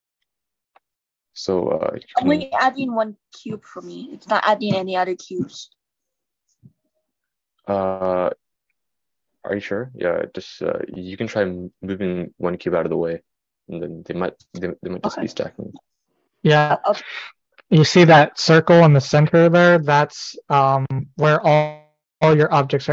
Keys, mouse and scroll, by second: 0.0-22.9 right drag, 16.2-22.9 drag.